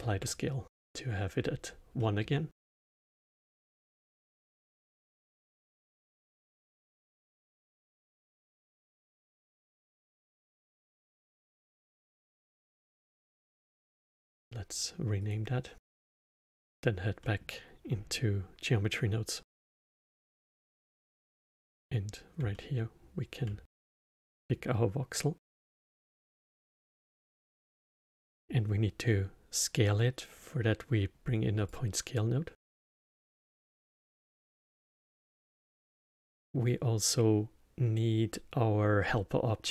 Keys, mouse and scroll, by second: 0.0-4.1 alt+middle drag, 4.1 click, 7.8 click, 8.0-11.1 drag, 11.5 BackSpace, 15.2 click, 16.1 click, 17.2-20.2 middle drag, 20.3-22.5 drag, 22.5-25.5 alt+middle drag, 25.5-26.7 drag, 26.7-27.6 middle drag, 27.6 shift+a, 34.0 middle click, 34.7 shift+a.